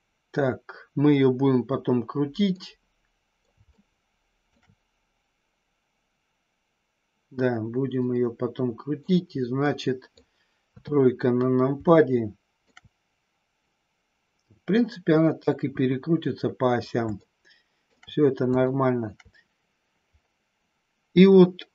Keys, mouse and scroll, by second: 2.6 middle click, 3.8 shift+middle click, 7.9-8.9 middle drag, 9.7 middle click, 10.8 KP_3, 12.1 middle click, 15.7 KP_1, 17.2 middle click, 18.7 shift+middle click.